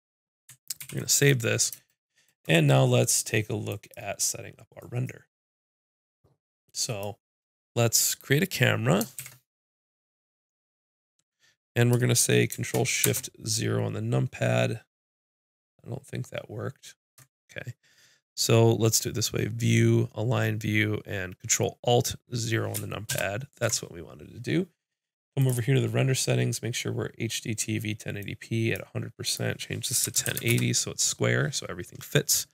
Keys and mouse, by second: 0.8 ctrl+s, 3.7-6.1 drag, 6.1-9.0 drag, 9.2 shift+a, 18.9 click, 26.6-32.5 drag.